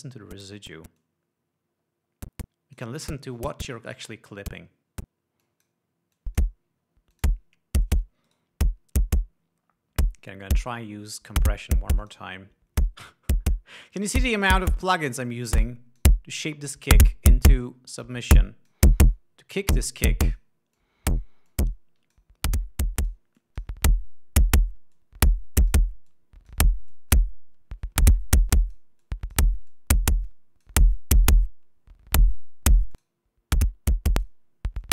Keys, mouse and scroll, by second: 0.0-0.5 drag, 1.5 click, 5.9-6.3 drag, 6.6-7.1 drag, 7.6-8.5 drag, 8.8 click, 12.5 click, 14.6 click, 15.8-16.7 drag, 17.2-18.6 drag, 18.8-19.4 drag, 19.6-21.0 drag, 21.2-21.8 drag, 22.0-22.8 drag, 23.3-23.8 drag, 23.9-24.3 drag, 25.4-26.4 drag, 26.6-27.2 drag, 27.4 click, 28.9-29.4 drag, 29.5-30.0 drag, 30.2-30.7 drag, 30.8-31.3 drag, 33.4 click, 34.7 click.